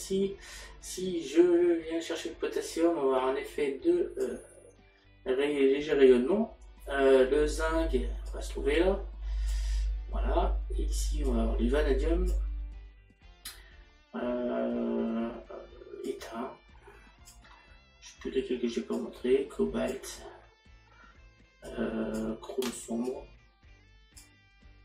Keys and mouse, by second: 2.8 click, 11.3 click, 16.2 click, 19.0 click, 21.7 click, 23.1 click.